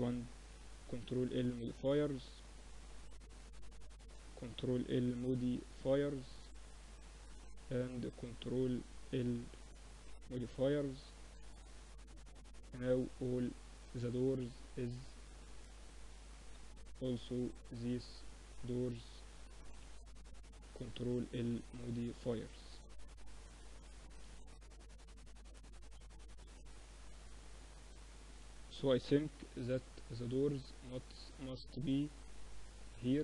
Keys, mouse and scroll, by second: 2.2-4.7 drag, 3.9 ctrl+l, 7.5-9.0 drag, 9.0 ctrl+l, 10.4 middle click, 10.5 z, 14.8 middle click, 15.7-19.8 drag, 18.7 ctrl+l, 20.3 a, 20.5-22.2 middle drag, 22.9 KP_1, 24.0 KP_3, 25.5 z, 27.2 a, 27.4 a, 28.3 b, 31.0-32.8 drag.